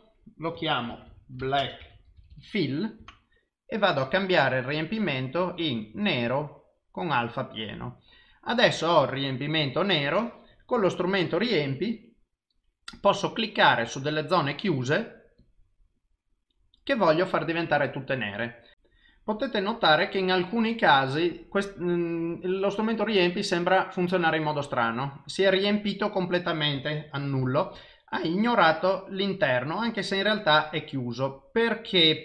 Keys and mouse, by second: 2.3 l, 4.2 click, 13.9 click, 15.4 click, 27.5 ctrl+z.